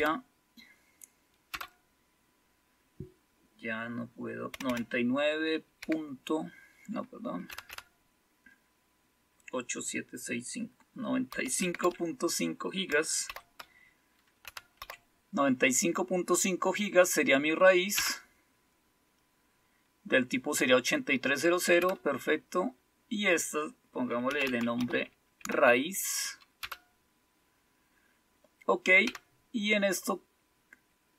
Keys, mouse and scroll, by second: 1.5 typing, 4.5 typing, 5.8 typing, 7.4 typing, 11.0-13.2 typing, 14.4-14.8 typing, 17.9 Return, 21.8 Return, 24.0-25.4 typing, 26.6 Return, 29.0 Down.